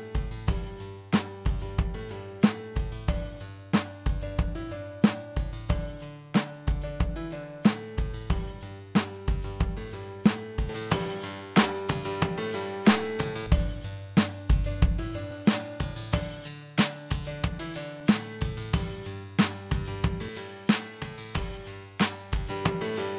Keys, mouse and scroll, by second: 0.4 shift+Return.